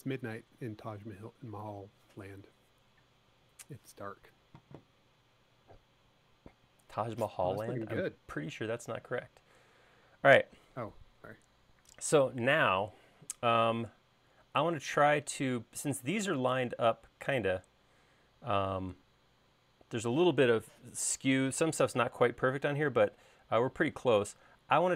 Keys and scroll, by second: 24.1 l.